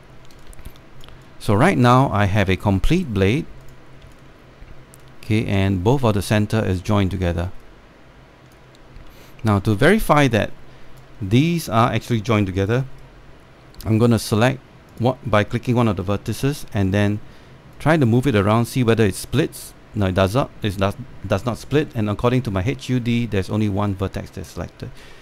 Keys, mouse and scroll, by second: 2.3 alt+click, 2.9 right click, 3.9 click, 5.2-7.0 alt+drag, 7.4 scroll up 1, 7.5 scroll down 1, 7.7-8.1 scroll up 1, 8.1 alt+click, 9.6 scroll up 1, 9.8 alt+middle click, 11.9 scroll up 1, 12.2 alt+middle click, 12.7 alt+click, 13.7-15.6 right drag, 15.6 click, 17.0 w, 17.1 w, 18.4-22.4 drag, 22.4 z, 24.6-25.2 scroll down 1.